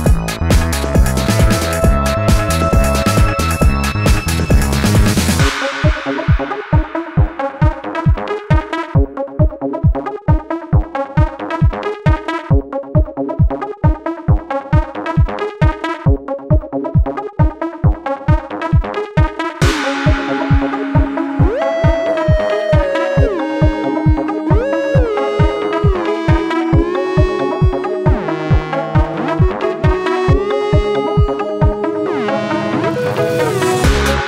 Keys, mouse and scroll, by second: 5.4 ctrl+shift+a, 5.7 alt+scroll down 1, 5.9 space, 7.0-7.3 alt+scroll up 1, 13.4 ctrl+shift+a, 13.8 alt+scroll down 1, 14.0 space, 14.9-15.5 alt+scroll up 2, 15.5 space, 21.3 alt+scroll up 1, 21.4 space, 24.5 ctrl+z, 26.3 ctrl+shift+a, 26.9 alt+scroll down 1, 27.2 space, 28.1 alt+scroll up 1, 28.3 space.